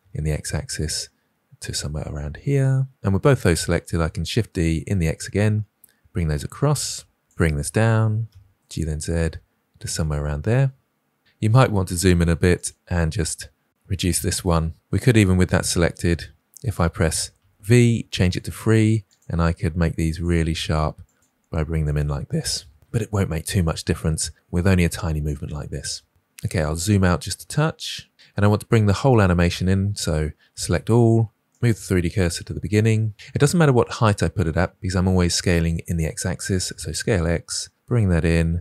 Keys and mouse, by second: 4.0 shift+d, 7.9 g, 12.5 click, 13.8 g, 17.3 v, 19.0 click, 19.3 g, 21.0 click, 21.2 g, 26.8 ctrl+click, 27.3 middle click, 27.8 ctrl+click, 28.1 ctrl+click, 30.6 a, 31.4 shift+right click, 36.6 s.